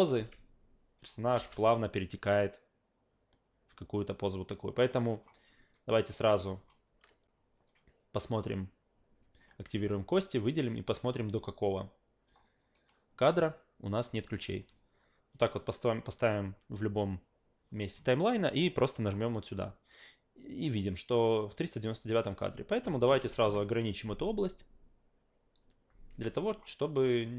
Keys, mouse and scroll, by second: 0.1 alt+v, 1.9-5.2 drag, 5.5 alt+right click, 5.9 alt+middle click, 6.2 alt+right click, 6.5 alt+click, 7.7 click, 9.3 click, 10.5 click, 11.6 click, 15.9 click, 19.0 click, 22.2 click, 26.2 alt+right click, 26.4 alt+click.